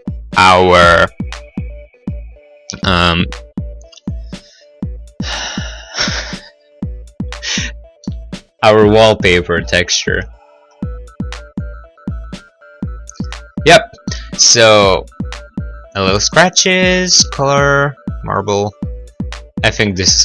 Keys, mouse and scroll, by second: 0.1 middle click, 0.2 scroll, 0.3 middle click, 0.5 middle click, 0.9 middle click, 4.7 click, 8.3 middle click, 8.3 scroll, 8.6 middle click, 10.3 click, 14.3 middle click, 14.6 middle click, 14.8-15.5 scroll, 18.6 scroll.